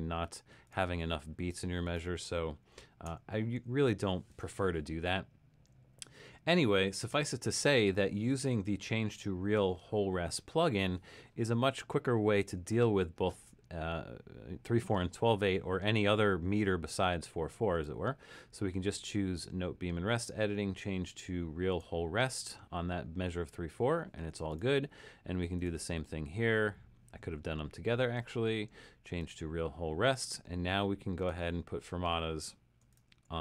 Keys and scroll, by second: 1.4 Escape, 3.2 BackSpace, 7.2 BackSpace, 8.8 super+-, 9.4 super+-, 32.8-33.4 typing.